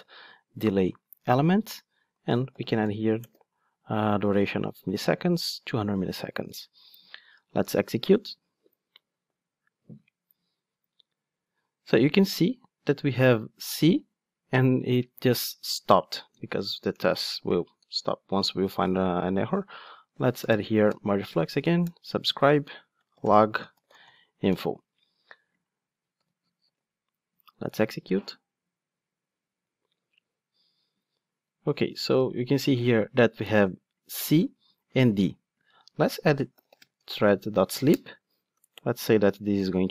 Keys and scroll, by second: 0.5 Return, 7.6 ctrl+shift+d, 16.4 Tab, 20.8 Tab, 20.9 Return, 26.6 ctrl+shift+d.